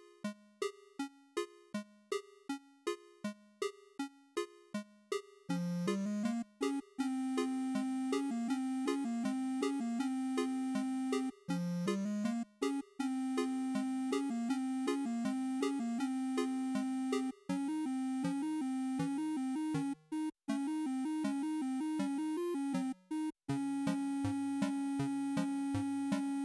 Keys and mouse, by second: 13.3-14.6 drag, 15.3 click, 19.8-25.8 drag.